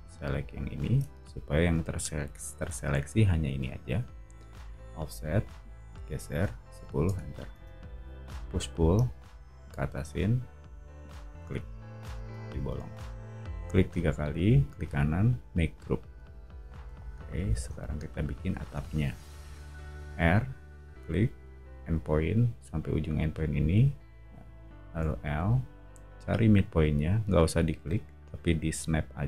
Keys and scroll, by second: 4.5 f, 6.4-8.8 typing, 13.4 space, 16.9 o, 19.3 r, 25.0 l.